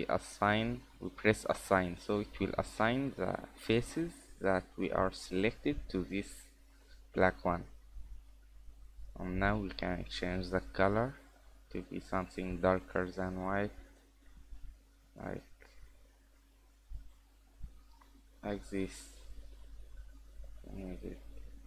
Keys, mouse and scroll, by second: 1.5 scroll down 3, 1.8 middle click, 2.3-2.9 scroll up 1, 2.9-4.5 scroll up 3, 8.1 click, 9.5 click, 13.8-14.1 scroll down 5, 14.1 middle click, 14.5 scroll up 3, 14.7 Tab, 15.2 middle click, 17.1 click, 18.0 Tab, 18.9-19.6 scroll down 2, 19.6 click, 19.6-20.1 scroll down 1.